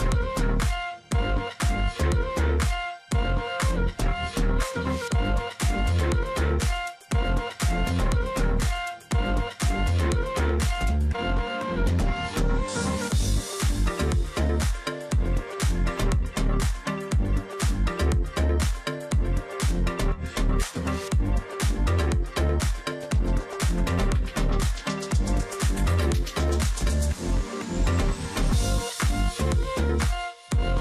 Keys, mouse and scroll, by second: 0.7-1.5 alt+scroll up 1, 1.5 alt+scroll, 1.5 space, 3.0 space, 5.1 ctrl+click, 5.3-6.2 alt+scroll down 1, 6.2-6.9 alt+scroll up 1, 6.9 alt+scroll down 1, 7.1-7.8 alt+scroll up 1, 8.0 alt+scroll down 1, 8.2-9.1 alt+scroll up 1, 9.1 alt+scroll down 1, 11.9 alt+scroll down 1, 12.1 alt+scroll up 1, 12.3 space, 12.6-13.1 alt+scroll up 1, 14.3 double click, 18.6 ctrl+click, 19.3-19.8 alt+scroll up 1, 20.7 alt+scroll down 1, 20.8 space, 21.2-21.6 alt+scroll up 1, 21.9 alt+scroll up 1, 22.0 space, 23.2-23.7 alt+scroll up 1, 24.4 ctrl+z, 25.5 ctrl+z, 27.7 alt+click, 29.7 alt+click, 29.9 ctrl+click.